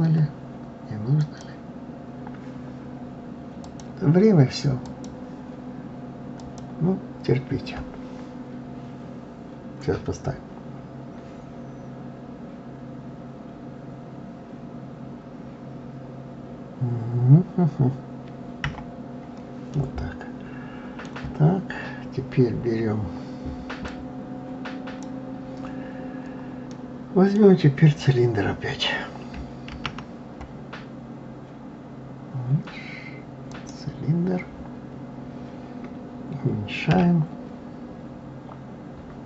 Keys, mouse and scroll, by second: 1.2 click, 3.6-6.5 drag, 18.6 KP_Divide, 19.7-21.3 middle drag, 21.3-21.7 scroll down 2, 23.9-26.7 drag, 26.7-29.7 middle drag, 29.7 shift+a, 34.5-34.9 scroll down 1, 36.9 s.